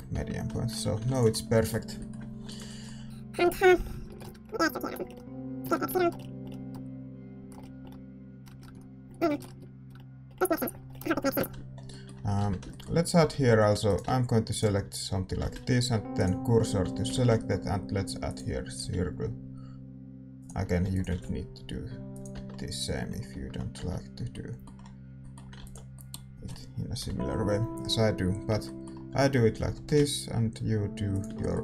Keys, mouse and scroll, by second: 0.1 Tab, 0.8 a, 1.3 ctrl+s, 3.4-4.5 middle drag, 3.8 Tab, 4.0 a, 4.1 a, 4.2 right click, 4.4 e, 4.5 click, 5.0 middle click, 5.6 s, 6.1-7.2 middle drag, 6.6 click, 7.5 middle click, 8.4 Tab, 8.6 Tab, 8.7 s, 9.4 ctrl+z, 9.5 a, 9.8 Tab, 10.8 ctrl+s, 10.8 click, 10.8 right click, 11.3 ctrl+s, 11.3 KP_7, 12.3 Tab, 12.3-16.2 middle drag, 13.2 a, 13.3 a, 13.8-16.7 right drag, 16.2 shift+s, 16.7 a, 18.3 shift+a, 18.8 s, 20.8 e, 21.1 s, 22.3 Tab, 22.4-24.6 middle drag, 23.3 Tab, 23.7 Tab, 25.9 ctrl+s, 27.0 KP_7, 28.1 middle click, 28.5 Tab, 29.1 a, 29.5 a, 29.7 e, 30.4 middle click, 31.3-31.6 middle drag.